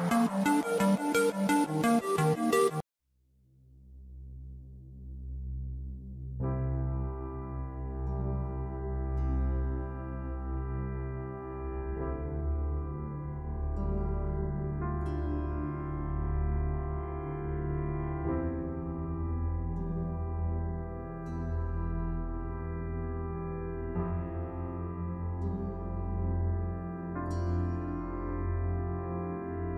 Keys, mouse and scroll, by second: 1.7 click, 2.5-4.0 scroll down 1, 4.0 space, 4.6 ctrl+alt+click, 5.6 ctrl+alt+click, 6.5 click, 7.3 ctrl+click, 9.6 scroll up 1, 10.0-10.8 scroll down 1, 11.6 ctrl+l, 13.1 click, 22.3-22.7 scroll up 1, 26.8 click.